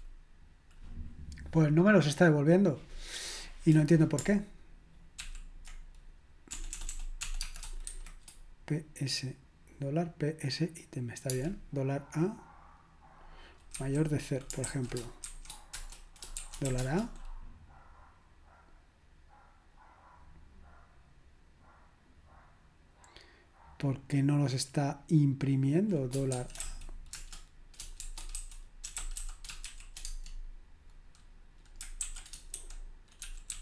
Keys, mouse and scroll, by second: 5.2 ctrl+p, 6.5-7.9 typing, 15.0-16.8 typing, 26.3-30.2 typing, 33.0-33.6 typing.